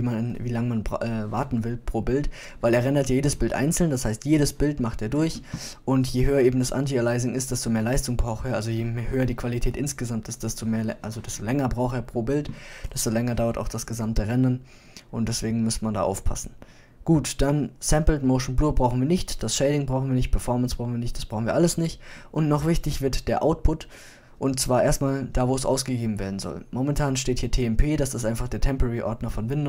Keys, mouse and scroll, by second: 8.2-10.4 middle drag, 12.3-14.7 middle drag, 29.5 click.